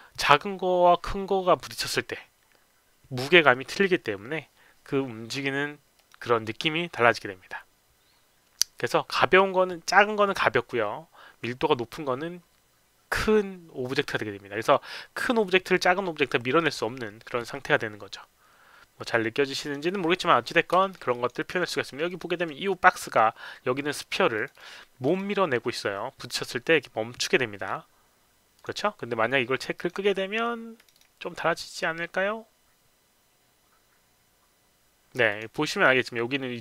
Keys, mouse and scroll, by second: 6.0 click, 19.6 click, 20.8 alt+middle click, 21.1 alt+click, 21.3 alt+right click, 21.7 alt+middle click, 22.1 alt+click, 24.3 click, 24.5 click, 25.0 click, 28.6 click, 29.7 click, 30.8 click, 30.9 click, 31.6 click, 35.3 click.